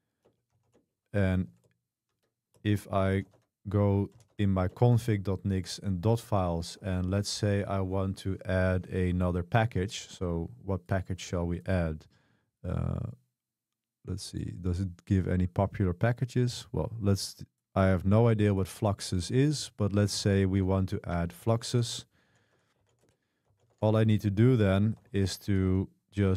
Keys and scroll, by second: 0.3 Return, 0.3-7.3 typing, 9.2 super+1, 22.0-26.3 typing.